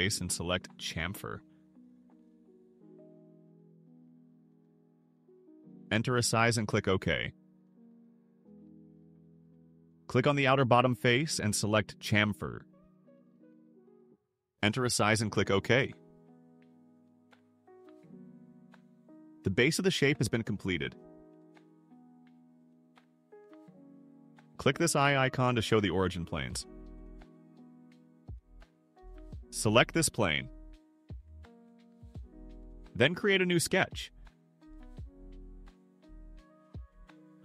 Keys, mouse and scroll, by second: 3.4 click, 5.2 1, 5.8 0, 7.2 click, 8.4 click, 9.7 click, 12.7 click, 14.0 2, 14.7 0, 17.2 click, 19.5 scroll down 1, 19.9 click, 20.8 click, 21.5 right click, 22.1 click, 23.2 scroll up 1, 26.1 click, 27.8 click, 30.3 click, 34.1 click.